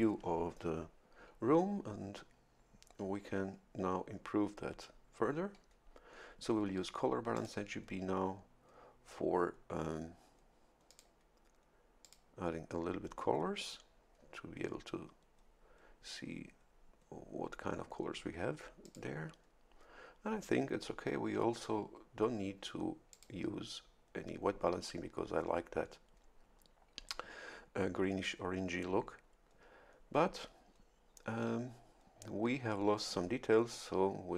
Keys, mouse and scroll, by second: 7.3 click, 10.9 click, 12.0 click, 18.8 click, 23.1 click, 24.7-28.2 drag.